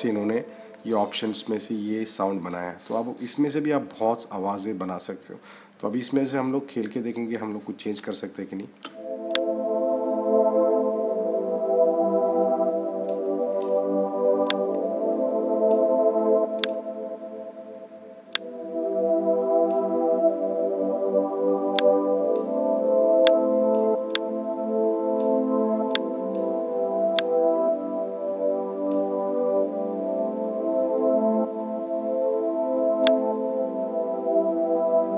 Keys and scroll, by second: 8.6 -.